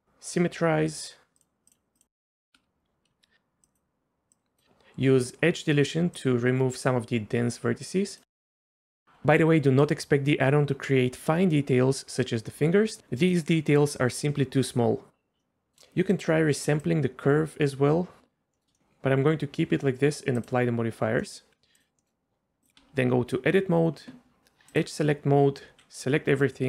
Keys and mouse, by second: 1.4 click, 2.5 shift+middle click, 3.7 click, 4.3 click, 6.2-8.2 drag, 8.7 shift+middle click, 15.4-15.8 middle drag, 16.9-18.2 shift+drag, 18.5 middle click, 20.4 click, 21.2 middle click, 21.8 drag, 22.0 middle click, 22.8 Tab, 24.7 click, 25.6 a, 26.5-26.6 right drag.